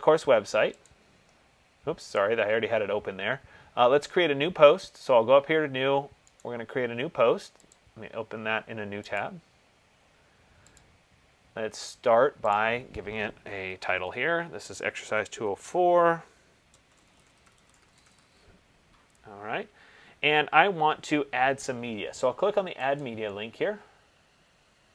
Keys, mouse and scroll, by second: 1.3 click, 2.4 click, 6.6 right click, 7.9 click, 9.4 click, 14.2-15.7 typing, 17.1-18.7 typing, 21.1 typing, 23.2 click.